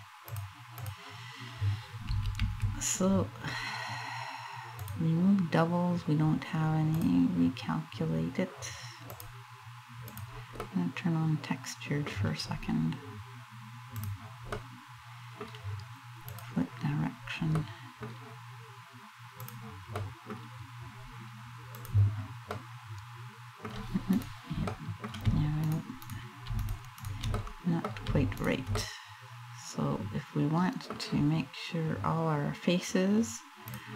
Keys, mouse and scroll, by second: 0.5 click, 1.9 a, 2.1 a, 4.4 click, 6.6 click, 8.7 click, 10.2 middle click, 12.0 scroll down 3, 13.6 click, 14.3 middle click, 15.9 click, 16.7 scroll up 2, 17.1 middle click, 19.2 click, 19.6 middle click, 21.4 click, 22.2 middle click, 23.5 middle click, 23.9 right click, 24.3 middle click, 25.3 shift+right click, 25.7 shift+right click, 26.3 shift+right click, 26.6 shift+right click, 27.0 middle click, 28.0 shift+right click, 28.4 middle click, 33.3 click.